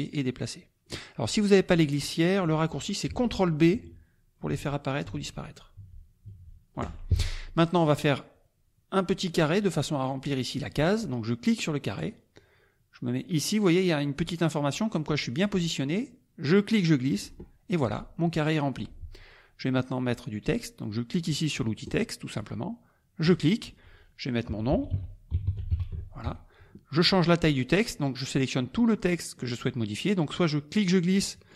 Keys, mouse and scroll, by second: 3.7 ctrl+b, 5.8 ctrl+b, 11.9 click, 16.5 click, 21.8 click, 23.2 click, 24.4-26.2 typing, 28.4-29.5 drag, 30.7-31.5 drag.